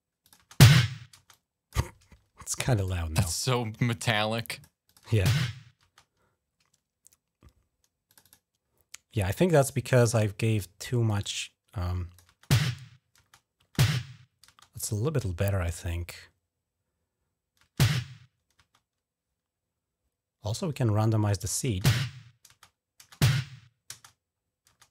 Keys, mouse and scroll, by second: 0.0 click, 0.1 space, 0.9 space, 1.1 click, 2.5 click, 3.1-4.4 drag, 4.3-6.1 typing, 4.6 click, 7.9 click, 8.0 click, 9.7 click, 10.8 click, 11.2 click, 12.1-14.2 typing, 17.4 space, 18.3 space, 20.7 scroll up 1, 21.4-23.6 typing, 22.4 scroll up 1, 24.1 scroll up 1.